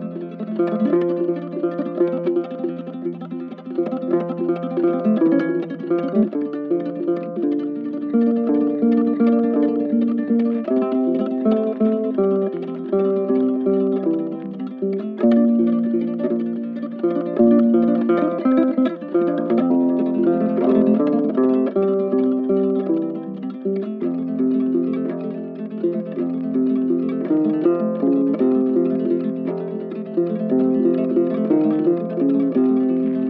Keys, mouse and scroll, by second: 4.1 right click, 4.5 ctrl+click, 29.0 right click, 29.6 shift+click, 30.0 shift+click, 31.9 ctrl+shift+click, 32.5 ctrl+shift+click, 32.8 ctrl+shift+click, 33.1 ctrl+shift+click.